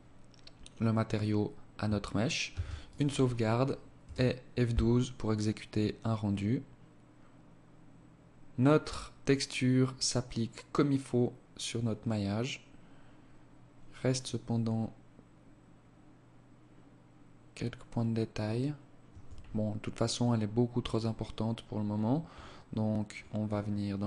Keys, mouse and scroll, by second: 1.5 ctrl+s, 18.1 Escape, 20.8 scroll up 1, 20.9-21.6 scroll down 12, 22.2-23.1 scroll up 11, 23.6 click.